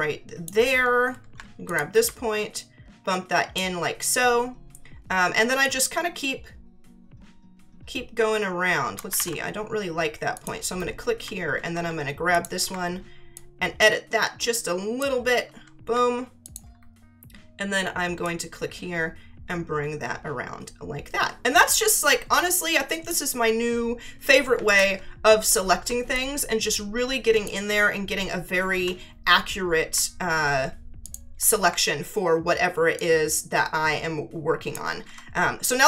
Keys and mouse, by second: 1.7 ctrl+click, 2.5 alt+click, 5.6 click, 9.1 ctrl+z, 10.3 click, 12.3 ctrl+click, 13.3 alt+click, 16.4 ctrl+click, 18.2 click, 24.6 ctrl+click, 26.1 ctrl+click, 31.0 ctrl+click, 33.0 alt+click.